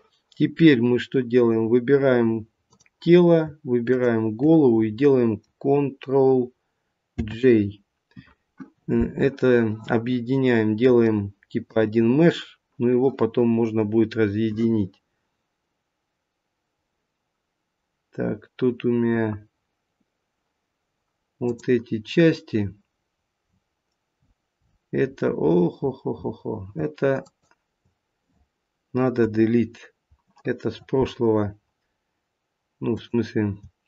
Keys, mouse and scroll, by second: 2.6 click, 3.8 shift+click, 7.1 ctrl+j, 11.0 shift+middle click, 21.4 click, 22.9-23.6 scroll down 5, 24.1-25.4 scroll down 15, 25.6 scroll down 12, 26.7-27.2 scroll down 5, 27.2 shift+click, 29.2 Delete, 32.9 click.